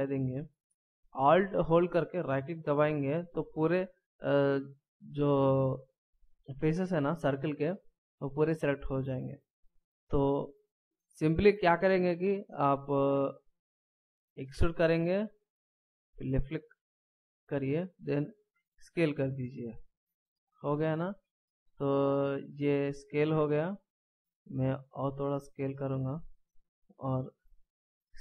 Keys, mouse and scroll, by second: 2.1 alt+right click, 7.5 middle click, 9.7 KP_1, 14.5 e, 18.5 s, 21.0 middle click, 24.2 s, 28.1 s.